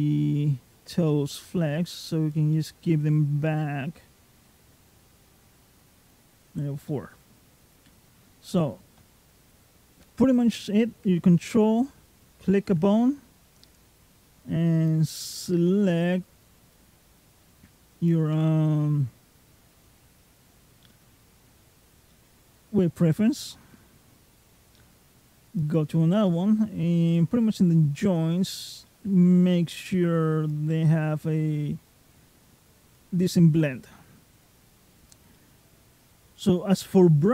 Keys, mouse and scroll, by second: 1.7 click, 2.4 middle click, 3.3 middle click, 4.3 middle click, 6.1-6.9 scroll down 4, 6.7 middle click, 7.7 scroll down 2, 8.0-8.8 scroll up 5, 8.8 middle click, 12.0 ctrl+click, 13.5 click, 15.8 click, 17.2 click, 18.2 middle click, 20.1 click, 20.7 middle click, 21.9 middle click, 25.4 ctrl+click, 26.1 middle click, 27.0 click, 28.7 middle click, 29.5 click, 30.5 middle click, 31.5 click, 33.1 middle click, 35.2 middle click.